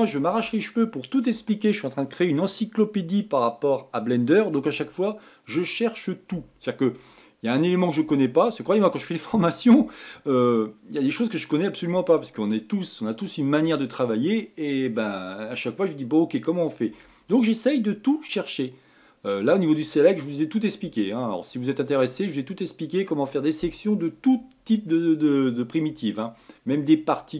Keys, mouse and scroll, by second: 0.8 scroll up 1, 0.9-3.9 scroll down 1, 18.3-21.3 middle drag.